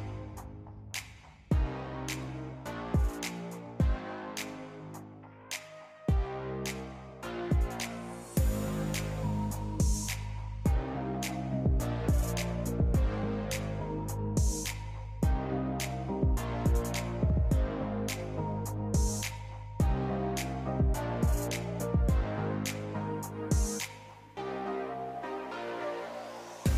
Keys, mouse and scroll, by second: 0.9 shift+click, 2.4 ctrl+b, 5.8-9.8 drag, 11.4-14.6 drag, 14.7-17.7 drag, 18.3 click, 20.8 Tab, 21.4 click, 22.0 click, 22.3 Tab, 23.2 click, 24.4 click, 24.9 click, 25.4 click, 26.5 3.